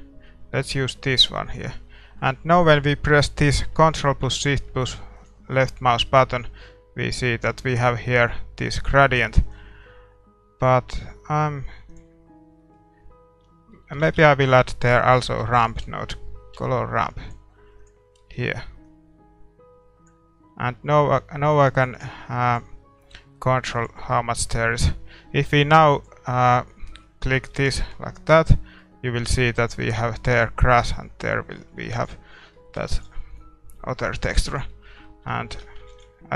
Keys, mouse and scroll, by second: 5.1-6.8 drag, 6.6-11.9 middle drag, 9.4-11.9 drag, 12.6-17.8 middle drag, 17.9-23.9 drag, 18.2-23.0 middle drag, 23.1-31.7 middle drag, 23.7 ctrl+s, 25.9-27.7 drag, 27.5 ctrl+s, 31.9 ctrl+s, 32.9 ctrl+s, 33.9-36.3 middle drag.